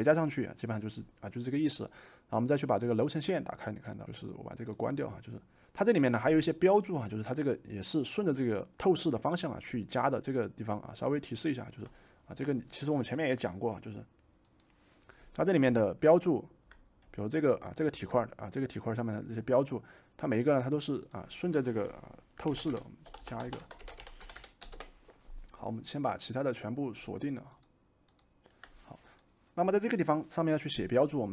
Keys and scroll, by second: 22.1-24.9 typing.